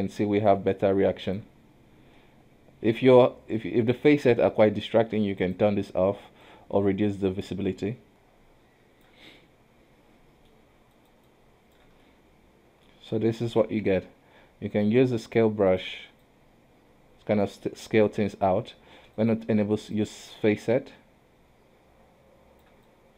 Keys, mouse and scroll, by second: 0.0 middle click, 0.6 click, 2.3-5.5 middle drag, 5.5-8.1 drag, 9.5-10.6 middle drag, 10.6 scroll up 1, 11.0 shift+click, 11.4 shift+click, 12.1-13.8 middle drag, 13.8 KP_1, 14.8-16.4 drag, 17.7 ctrl+z, 19.2 click, 20.1 click, 23.0 click.